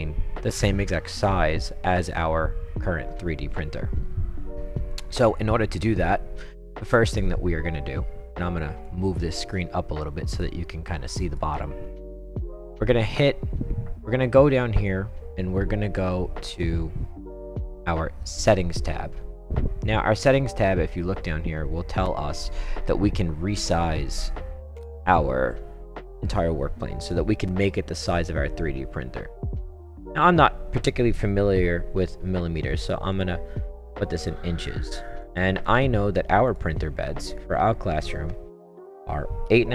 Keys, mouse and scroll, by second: 8.8-11.3 drag, 18.4 click, 29.4 click, 33.1 click, 35.2 click, 36.5 click, 38.9 8, 39.5 ..